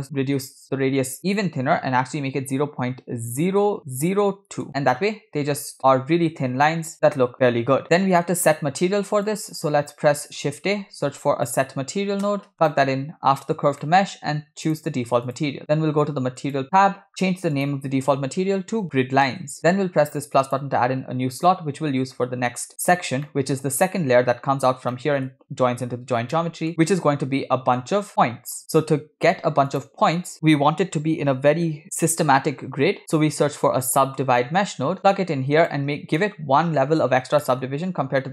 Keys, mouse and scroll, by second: 1.2-4.7 drag, 5.8 scroll up 5, 6.1 scroll down 2, 8.5 click, 9.3 click, 11.0 shift+a, 13.9 middle click, 14.0-14.7 scroll up 2, 14.7 click, 16.6 click, 17.2 scroll up 2, 17.6-19.6 drag, 20.4 drag, 22.8 scroll down 2, 23.3 middle click, 25.0 middle click, 26.4 middle click, 28.6 scroll up 2, 29.1 shift+a, 36.2 middle click, 37.5-37.8 middle drag.